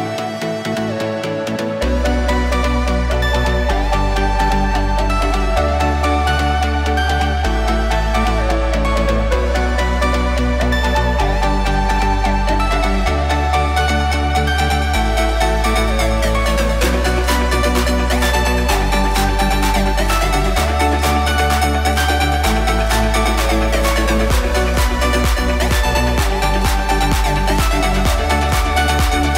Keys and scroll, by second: 12.5 shift+Delete.